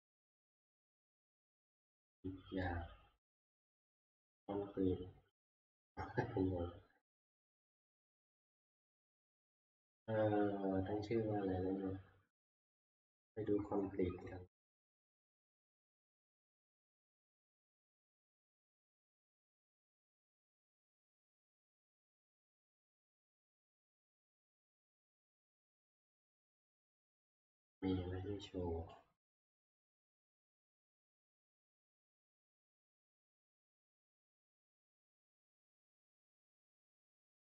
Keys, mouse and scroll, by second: 12.7 click, 13.8 middle click, 14.6 F11, 15.7 middle click, 15.8 middle click, 15.8 middle click, 15.9 middle click, 16.2 middle click, 16.7 scroll down 6, 17.8-21.5 scroll down 28, 21.5 scroll, 25.9 click, 28.9 click, 29.4 click, 29.6 click, 30.2 click.